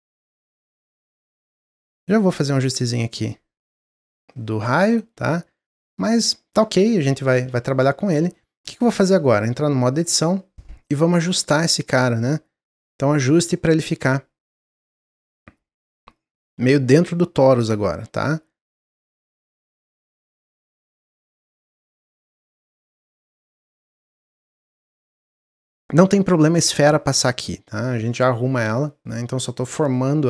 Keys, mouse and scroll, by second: 0.2-3.4 drag, 4.2-9.0 middle drag, 9.0 Tab, 9.3 middle click, 9.8 click, 10.5 click, 11.1 middle click, 11.9 click, 12.6 click, 13.3 middle click, 13.9-14.3 scroll up 1, 14.5 click, 15.0 s, 16.5 click, 18.4 s, 20.0 click, 21.0 click, 21.8-24.8 drag, 24.9 middle click, 25.2 scroll up 2, 25.5 middle click, 26.2-29.3 drag, 29.8-30.2 middle drag.